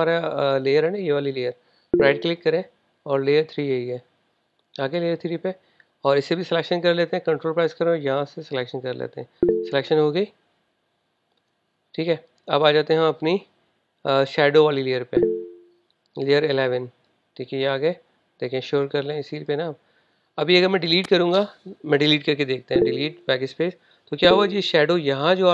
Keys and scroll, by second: 23.2 BackSpace.